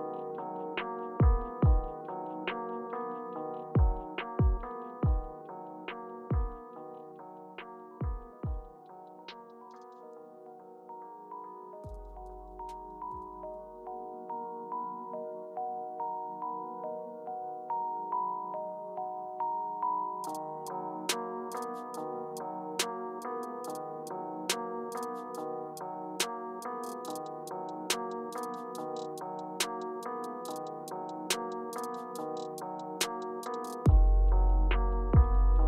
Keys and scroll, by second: 2.0 2, 2.1 Return, 4.2 typing, 21.7 Page_Down, 25.0 Return, 26.1 Right, 26.7 Right, 27.5 typing, 29.6 typing, 32.1 Return, 35.1 super+y.